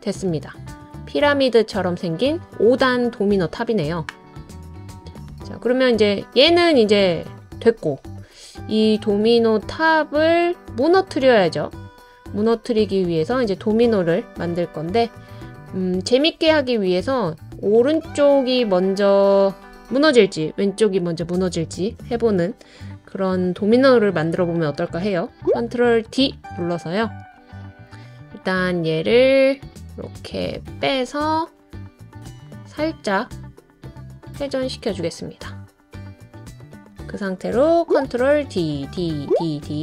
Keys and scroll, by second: 4.6 typing, 13.7 typing, 26.0 super+d, 38.4 super+d, 38.9 super+d, 39.3 super+d.